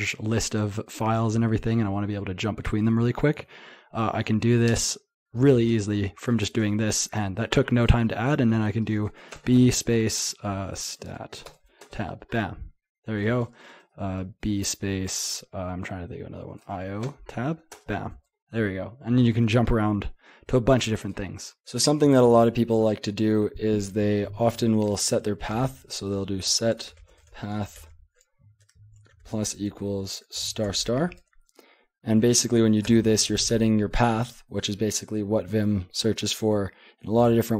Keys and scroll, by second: 5.7 Return, 25.6-29.4 typing, 30.6 typing, 32.9 Return.